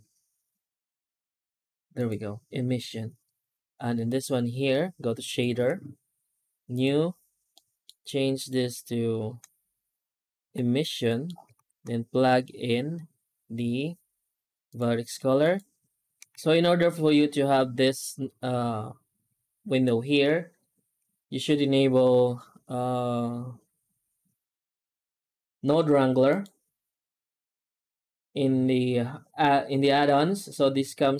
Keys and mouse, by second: 3.9 right click, 5.3 click, 6.6 click, 7.4 middle click, 8.3 right click, 8.6 shift+s, 11.0 middle click, 11.4 shift+a, 16.2 shift+a.